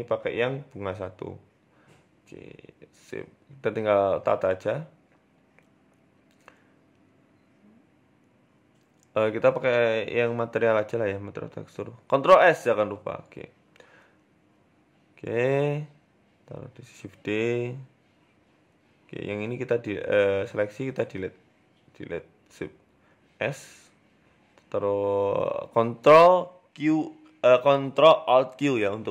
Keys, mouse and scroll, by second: 0.4 middle click, 0.9 KP_1, 1.1 Tab, 1.9 g, 2.8 s, 3.7 scroll up 2, 3.9 shift+middle click, 6.3 middle click, 6.7 scroll up 3, 7.3 middle click, 8.8 z, 12.7 KP_7, 13.5 right click, 14.4 KP_1, 14.8-15.3 scroll up 3, 15.8 shift+d, 16.7 Tab, 17.4 shift+middle click, 17.8-21.2 typing, 21.6 Delete, 22.3 Tab, 22.6-23.2 scroll down 2, 22.8 s, 23.8 KP_0, 24.6 ctrl+alt+q, 25.2-26.1 scroll up 10, 26.4 scroll down 2, 26.4-26.9 scroll down 4, 27.3-28.0 scroll down 2, 27.3 g, 28.8 shift+middle click.